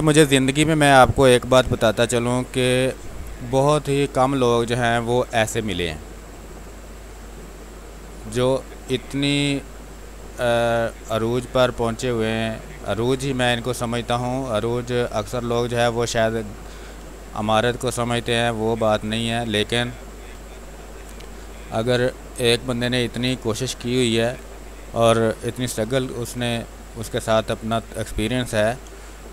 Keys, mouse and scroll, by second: 0.4 b, 1.6 space, 3.1-4.8 drag, 4.8 space, 5.0 click, 5.7 z, 6.4-8.1 drag, 8.1 space, 8.3 click, 8.6 space, 9.3-11.8 drag, 11.8 space, 12.1 click, 12.3 space, 13.0 ctrl+z, 14.5-16.4 drag, 17.0 space, 17.3 click, 17.5 space, 18.4 click, 19.1 space, 20.6 click, 21.3 space, 21.6 alt+click, 25.5 ctrl+d, 26.7 click, 27.2 space, 27.5 click, 27.7 space, 28.1 w, 28.8 click, 29.1 ctrl+space.